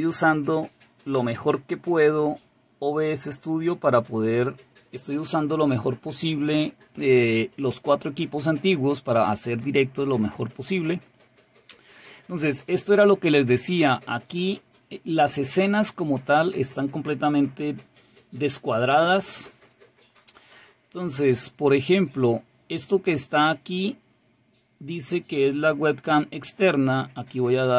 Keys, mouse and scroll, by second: 10.1 click, 22.8 click.